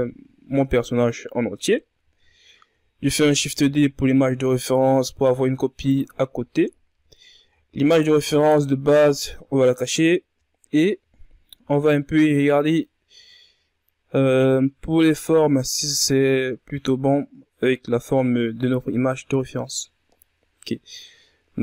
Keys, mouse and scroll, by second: 1.4 right click, 2.2-2.5 scroll down 4, 2.7 ctrl+scroll up 1, 3.9 shift+d, 8.6 right click, 10.4 click, 11.2 scroll up 1, 11.9-12.3 shift+scroll up 1, 12.3-13.6 scroll down 1.